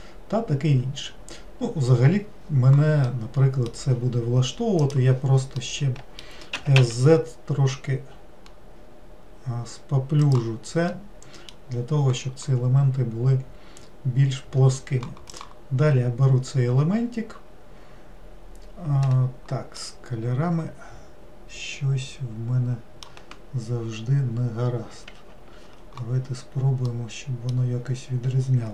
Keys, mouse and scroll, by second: 3.1-4.9 middle drag, 4.9 click, 5.6-6.6 middle drag, 6.6 s, 11.0-14.1 middle drag, 15.4 click, 19.9-23.0 middle drag, 26.9-28.7 middle drag.